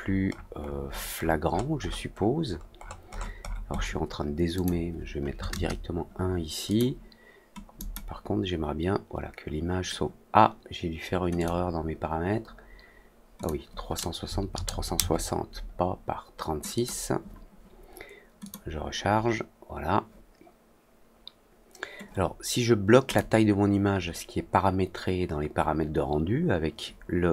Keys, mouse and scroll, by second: 0.2 middle click, 0.3 scroll up 1, 0.5 middle click, 0.8 middle click, 1.1-1.5 scroll down 4, 1.5 scroll up 2, 1.7-2.5 scroll down 6, 2.5 scroll up 2, 2.7-3.1 scroll down 4, 3.1 middle click, 3.3 middle click, 3.6 middle click, 4.5 click, 6.6 click, 7.7 click, 11.3-13.4 drag, 16.7 click, 18.3 click, 23.0 click.